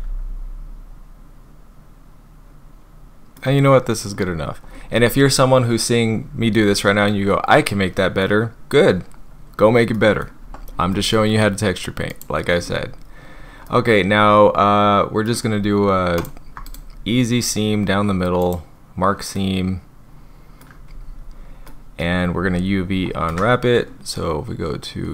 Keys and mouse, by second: 3.1 click, 4.4 Tab, 7.1 click, 9.9 click, 10.4 Tab, 10.9 click, 12.1 click, 13.7 click, 16.8-18.5 drag, 19.3-20.6 middle drag, 21.7 middle click, 22.3 Tab, 22.9 Tab, 23.3 a.